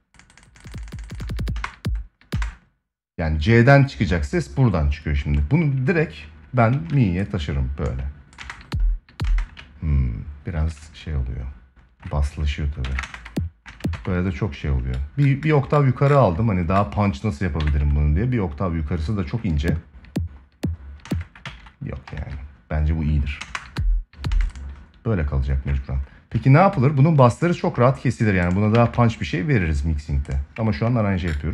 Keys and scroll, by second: 1.3 space, 6.5 ctrl+a, 8.1 space, 12.6 ctrl+Up, 17.3 ctrl+Up, 19.1 space, 20.7 space, 23.1 space, 28.4 ctrl+s.